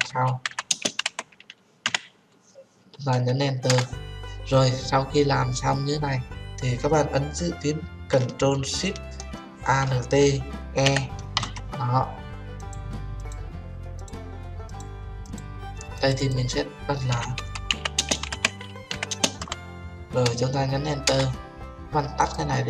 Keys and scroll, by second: 3.7 Return, 21.1 Return.